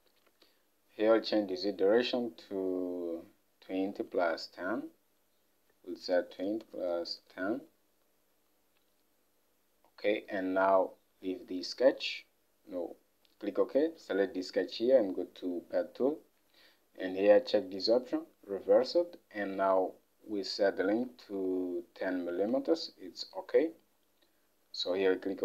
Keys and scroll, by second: 0.4 alt+Tab, 6.2-8.9 typing, 10.9-11.6 typing, 21.1 alt+Tab.